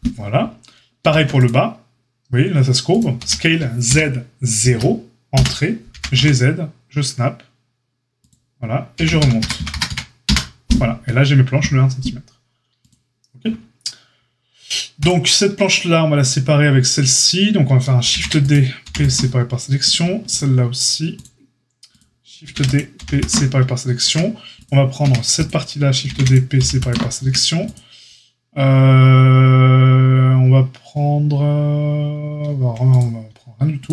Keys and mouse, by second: 1.0 ctrl+r, 3.1 s, 5.9 g, 12.7-15.0 drag, 15.0-20.3 middle drag, 18.1 shift+d, 18.8 p, 20.3-21.1 shift+drag, 21.1-21.9 shift+middle drag, 21.9-22.4 shift+drag, 22.4-24.5 shift+middle drag, 22.4 shift+d, 22.9 p, 24.0 Tab, 24.5 click, 24.6-25.4 middle drag, 25.0 Tab, 25.4-25.7 drag, 25.7-27.6 shift+middle drag, 26.0 shift+d, 26.5 p, 27.2 Tab, 27.6 click, 27.7-33.9 middle drag.